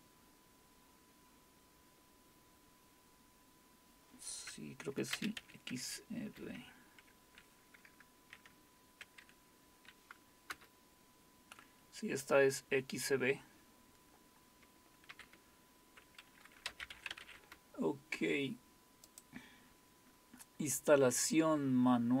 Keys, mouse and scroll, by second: 3.6-5.1 scroll down 1, 5.1-6.3 scroll down 1, 6.3-8.2 scroll down 1, 8.1-8.8 typing, 8.2 scroll down 1, 10.5 Return, 15.1 ctrl+c, 16.4-17.7 typing, 18.8-19.6 typing, 19.1 click, 20.1-22.2 scroll down 1.